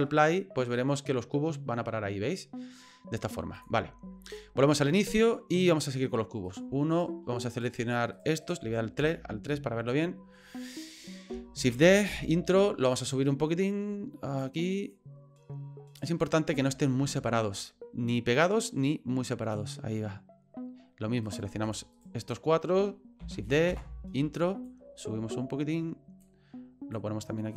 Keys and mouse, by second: 3.5 click, 4.3 click, 5.1 middle click, 6.5 right click, 6.9 shift+right click, 7.5 shift+right click, 8.1 shift+right click, 8.4 shift+right click, 9.0 KP_3, 11.6 shift+d, 12.9-14.4 drag, 14.9-16.0 drag, 16.7 shift+middle click, 18.1-19.5 drag, 21.2 right click, 21.6 shift+right click, 21.9 shift+right click, 22.2 shift+right click, 23.2 shift+d, 24.6-26.2 drag, 26.9-27.5 drag.